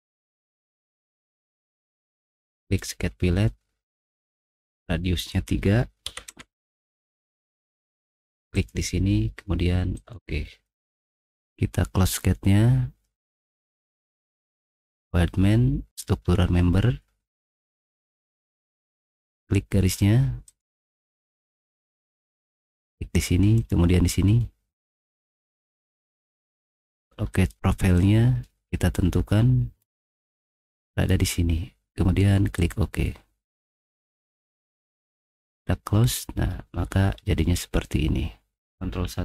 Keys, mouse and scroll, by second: 0.0 middle click, 1.0 middle click, 4.4 click, 6.1 3, 6.3 Return, 8.5 click, 8.6 Return, 9.9 click, 12.1 click, 14.7 click, 15.9 click, 20.5 click, 20.7 middle click, 23.6 click, 24.4 middle click, 24.9 middle click, 26.6 middle click, 26.6 scroll down 2, 27.3 click, 28.0 middle click, 28.0-28.4 scroll down 1, 28.5 middle click, 29.1 middle click, 29.8 scroll up 1, 30.9 click, 32.6 click, 34.0 middle click, 34.8 click, 36.0 middle click, 36.5 middle click, 36.8 middle click, 39.0 ctrl+1.